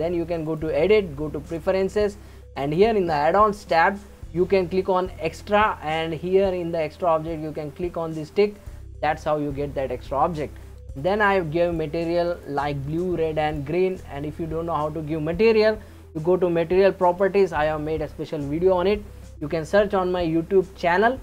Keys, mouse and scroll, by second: 0.4-3.6 drag, 11.0 click, 11.7 click, 12.4 click, 12.9 click, 13.5 click, 13.9 click, 17.1 click.